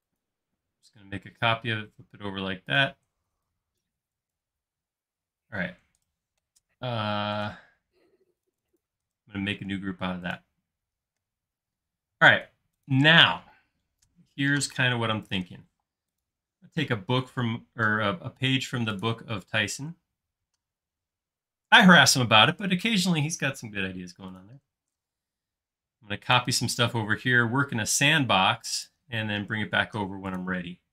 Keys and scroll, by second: 3.2 e, 5.0 space, 15.8 shift+m, 19.6 space, 25.1 m, 29.3 space.